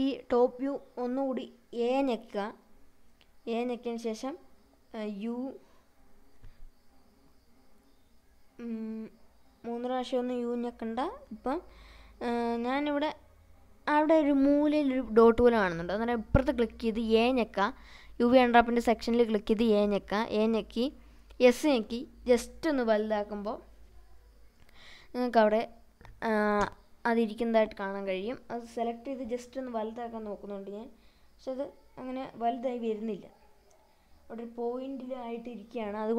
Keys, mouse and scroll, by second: 0.5 scroll up 2, 1.1 a, 1.7-4.6 middle drag, 5.0-5.5 scroll down 2, 5.3-7.3 middle drag, 8.1 s, 10.6 a, 11.1 s, 13.9-15.8 right drag, 15.9-17.4 scroll down 5, 18.3 click, 19.4-19.8 scroll up 1, 20.8 s, 24.3 click, 28.2 typing, 28.4 click, 30.1-31.2 drag, 32.4-34.7 right drag, 34.7 click, 35.8 scroll up 3.